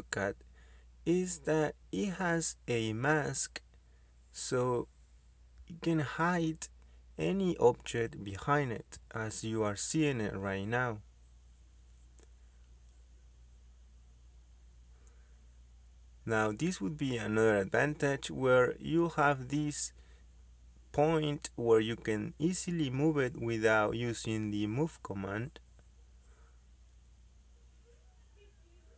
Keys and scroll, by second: 18.1 Escape, 25.0 Escape, 26.0 m, 26.9 space, 28.3 space.